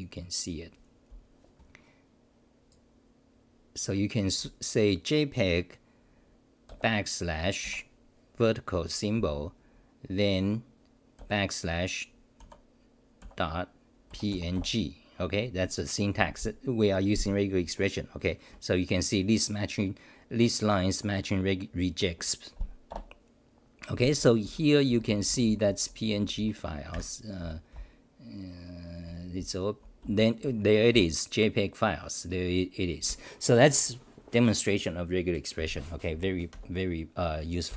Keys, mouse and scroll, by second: 7.6 Right, 12.4 u, 23.0 Return, 24.5 w, 24.9 t.